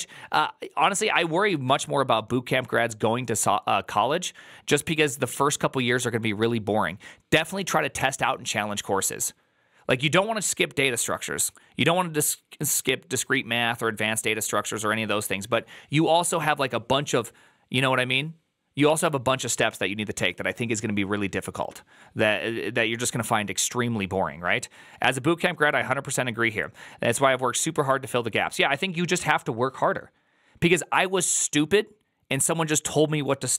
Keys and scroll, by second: 1.5 alt+[.